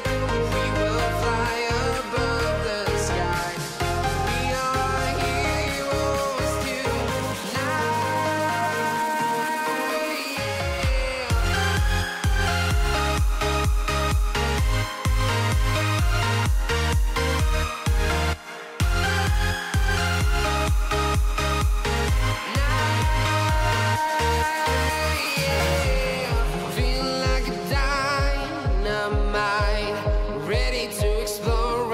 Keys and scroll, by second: 7.7 alt+Tab, 11.7 Tab, 11.7 space, 12.6 ctrl+v, 17.0 ctrl+a, 23.9 /.